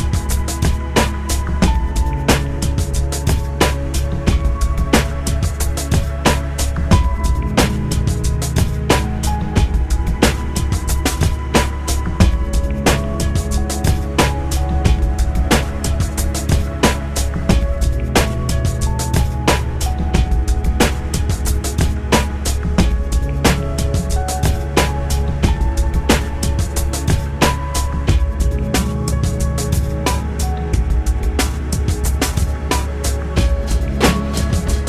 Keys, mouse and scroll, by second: 4.0 Tab, 7.5 click, 11.2 right click, 17.8 click, 19.4 click, 22.6 click, 24.5 click, 26.6 click, 27.7 click, 30.2 click.